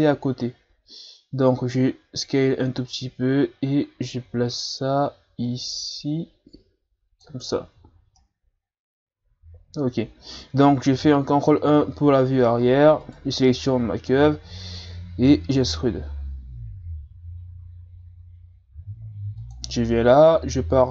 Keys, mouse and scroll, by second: 2.2-5.2 drag, 7.5 Tab, 7.8 a, 7.9 scroll down 2, 8.2-10.9 middle drag, 10.9 ctrl+KP_1, 11.8-12.1 ctrl+scroll down 2, 12.1-13.0 scroll up 1, 13.0 right click, 13.5 Tab, 15.3 e, 20.3 KP_7.